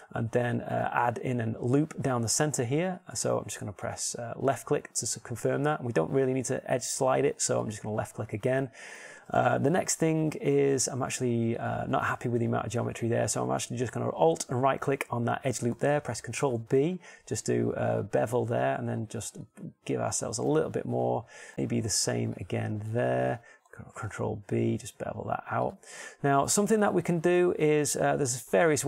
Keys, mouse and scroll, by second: 0.1 ctrl+r, 8.5-10.4 middle drag, 11.6 middle click, 12.3 click, 17.2 ctrl+b, 22.7 ctrl+shift+Tab, 24.9 ctrl+b, 26.7 click.